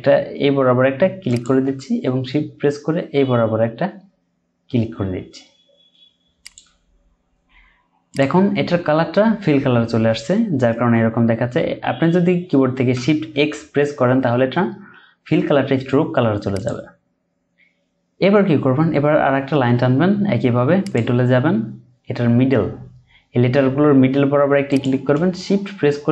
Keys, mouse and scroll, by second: 1.3 shift+click, 6.4 shift+click, 13.3 x.